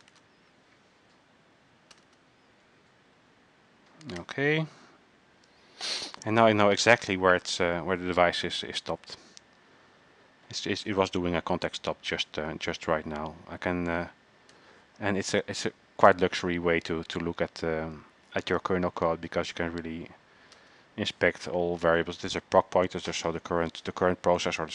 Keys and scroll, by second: 0.1 typing, 2.1-2.9 typing.